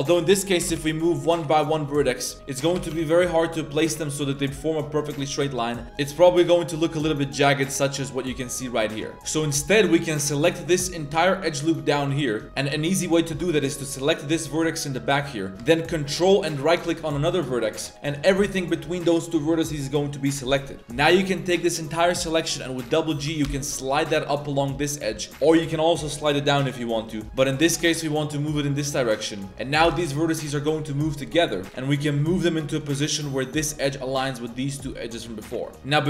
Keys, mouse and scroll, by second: 0.6 g, 2.3 g, 2.8 g, 5.4 middle click, 5.8 g, 6.2 a, 6.3 a, 6.5-6.9 middle drag, 7.9-8.7 middle drag, 8.8 middle click, 9.1 ctrl+z, 9.1 middle click, 10.5 right click, 11.0 shift+right click, 12.0-12.4 shift+right drag, 12.6-13.1 right drag, 13.3 ctrl+z, 14.0 right click, 14.5 g, 17.0 ctrl+right click, 20.6-20.9 middle drag, 23.2 g, 25.5 g, 27.2 middle click, 27.6 g, 29.5 g, 29.8 g, 33.0-33.3 middle drag, 35.6 middle click.